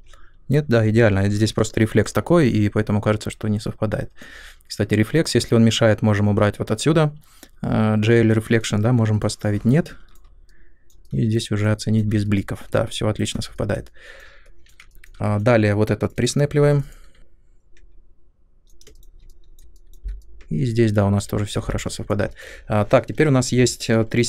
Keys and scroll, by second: 16.5 3, 17.2 w, 18.8 space, 23.4 3.